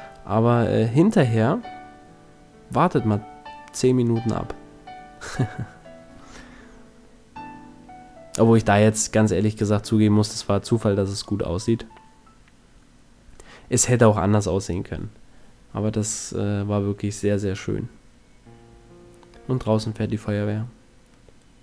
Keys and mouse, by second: 1.8 a, 2.4 Tab, 3.6 z, 4.4 a, 7.6-9.6 middle drag, 19.6 KP_1, 21.1 Tab.